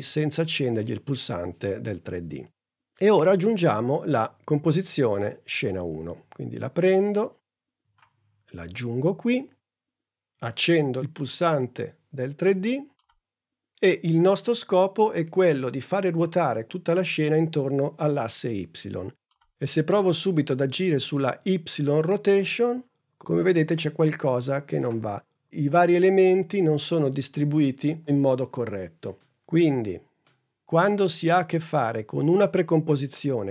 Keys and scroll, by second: 19.3 r, 30.1 super+z.